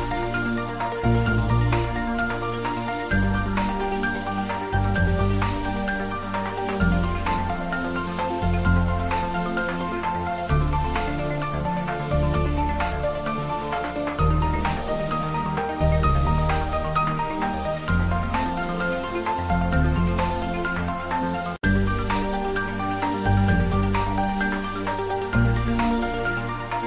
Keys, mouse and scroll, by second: 0.2 click, 0.3 Tab, 0.9 g, 1.5 x, 2.5 click, 2.8 ctrl+s, 3.1 ctrl+middle click, 3.5 middle click, 4.2 shift+z, 4.5 ctrl+middle click, 4.7 Tab, 5.3 click, 6.0 a, 6.6 alt+e, 7.4 click, 9.5 click, 10.5 Tab, 10.7 s, 11.3 click, 11.7 g, 12.5 x, 13.7 click, 14.0 ctrl+middle click, 14.3 shift+middle click, 15.4 r, 16.2 click, 16.5 h, 17.2 ctrl+z, 17.5 g, 18.0 z, 19.6 click, 20.2 middle click, 20.5 click, 21.2 ctrl+3, 21.6-23.3 middle drag, 23.3 right click, 23.8 click, 24.3 ctrl+middle click, 24.9 click, 25.1-26.8 middle drag.